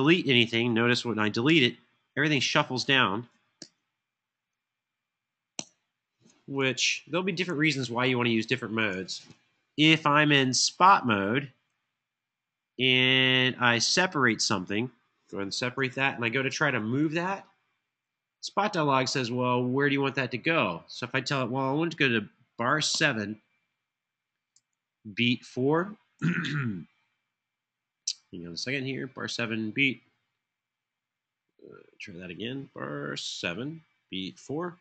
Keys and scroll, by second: 1.2 BackSpace, 3.4 BackSpace, 5.2 BackSpace, 6.8 super+z, 7.2 super+z, 7.6 super+z, 15.6 super+e, 17.0 Home, 22.7 7, 24.3 Tab, 26.0 Caps_Lock, 33.1 7.